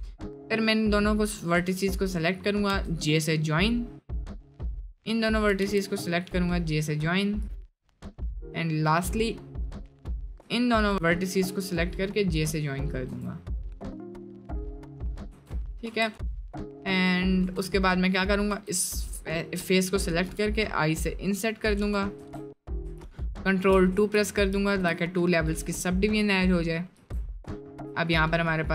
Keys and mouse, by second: 2.8 j, 3.1 middle click, 4.2 middle click, 5.7 j, 6.0 middle click, 6.5 middle click, 7.4 click, 7.6 middle click, 9.2 middle click, 9.7 middle click, 11.3 j, 12.4 click, 12.8 middle click, 13.2 Tab, 13.8-15.3 drag, 16.3 middle click, 17.2 middle click, 18.5 3, 18.7 click, 19.1 middle click, 20.2 i, 22.2 Tab, 23.8 ctrl+2, 25.5 Tab, 27.7 shift+middle click, 28.4-28.7 middle drag.